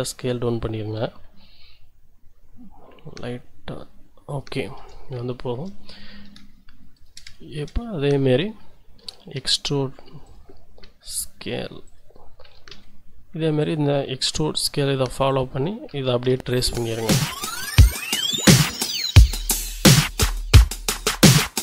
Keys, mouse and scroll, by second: 1.3 s, 4.3 click, 4.7 a, 5.3 shift+click, 5.5 shift+middle click, 5.8-6.1 shift+scroll down 2, 6.9 alt+shift+middle click, 7.3 alt+shift+middle click, 7.7 alt+shift+scroll up 2, 9.0 e, 9.3 z, 10.2 click, 10.8 s, 11.8 click, 12.4 e, 12.7 z, 13.6 click, 14.2 s, 15.3 click, 15.9 e, 16.2 z, 17.1 click, 17.7 s, 19.5 click, 19.9 shift+click, 21.1-21.6 shift+middle drag, 21.2 e, 21.5 z.